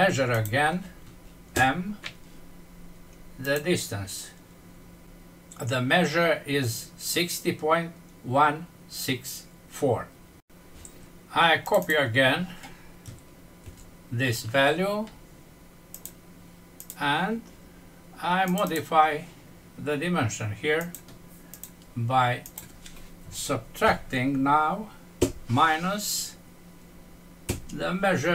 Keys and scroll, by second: 13.5 ctrl+c, 23.8 End, 27.5 ctrl+v.